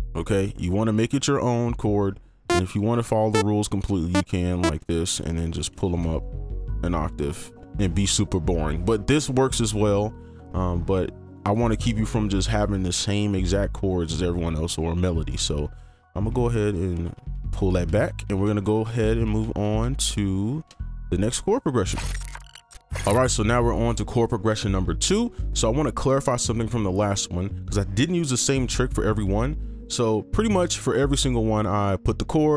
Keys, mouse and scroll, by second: 4.6 double click, 4.8 ctrl+click, 5.5 ctrl+right click, 5.8 ctrl+click, 7.2 ctrl+shift+Up, 13.1 Delete, 13.7-14.5 scroll down 1, 14.5 scroll down 1, 14.5 scroll up 1, 14.7-15.2 scroll down 1, 15.3 right click, 16.3 ctrl+z, 16.9 ctrl+alt+z, 17.1 ctrl+alt+z, 17.3 ctrl+alt+z, 17.5 ctrl+alt+z, 17.7 ctrl+alt+z, 17.9 ctrl+alt+z, 18.0 ctrl+alt+z, 18.4 ctrl+alt+z, 18.6 ctrl+alt+z, 18.8 ctrl+alt+z, 19.0 ctrl+alt+z, 19.2 ctrl+alt+z, 19.4 ctrl+alt+z, 19.6 ctrl+alt+z, 19.8 ctrl+alt+z, 20.0 ctrl+alt+z, 21.2 right click, 21.2-21.8 scroll up 1.